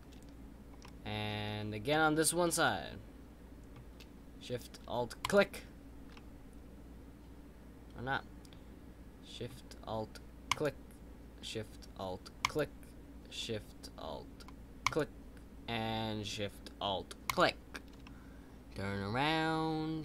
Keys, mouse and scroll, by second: 0.8-2.2 middle drag, 2.2-2.6 scroll down 2, 2.6-5.2 middle drag, 5.2 alt+shift+click, 6.1-9.2 middle drag, 10.4 alt+shift+click, 18.0-19.2 middle drag.